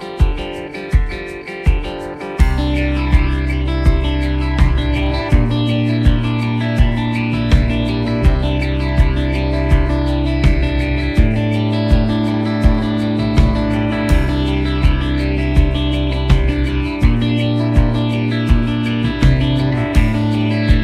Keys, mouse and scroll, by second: 0.8-2.6 drag, 3.3 right click, 3.6 click, 4.2 right click, 4.5 click, 4.6 right click, 5.1 click, 7.0 right click, 7.5 click, 7.8 right click, 8.0 click, 9.1 click, 11.5-12.2 typing, 11.7 click, 13.7 click, 14.1-16.6 typing, 14.5 click, 16.8 click, 18.5 click, 20.6 click, 20.7 space.